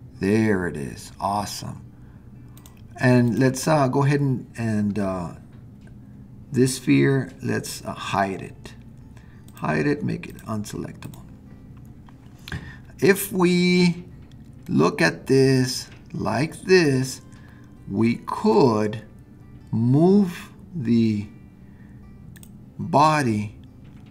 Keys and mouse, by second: 2.6 click, 9.5 click, 10.3 click, 11.0 click, 14.7-15.7 middle drag, 16.5-24.1 middle drag.